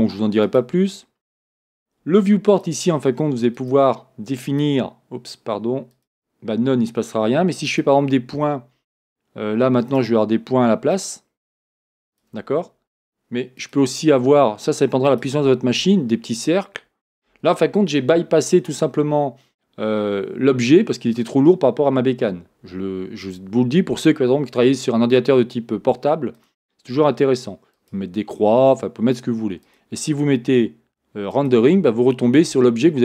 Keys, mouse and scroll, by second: 0.5-10.1 drag, 11.0-12.4 drag, 13.6-33.0 drag.